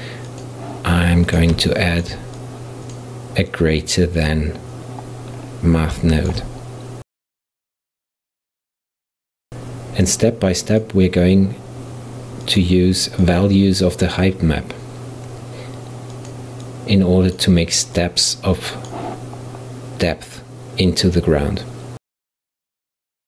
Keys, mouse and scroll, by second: 1.7 shift+middle click, 2.4 click, 2.9-5.5 drag, 5.5-6.1 scroll up 3, 6.1-7.7 shift+middle drag, 7.7-9.3 drag, 9.4-11.4 drag, 11.9-13.9 drag, 14.3 click, 18.1 click, 18.9-21.9 drag, 22.3-23.2 drag.